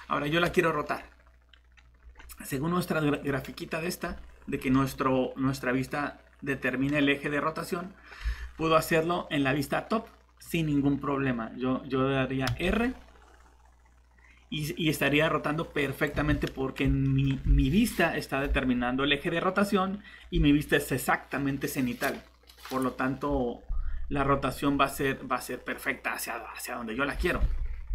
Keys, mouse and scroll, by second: 3.1 click, 4.1 scroll down 1, 8.3 alt+Tab, 12.5 r, 16.1 Escape, 17.0 middle click.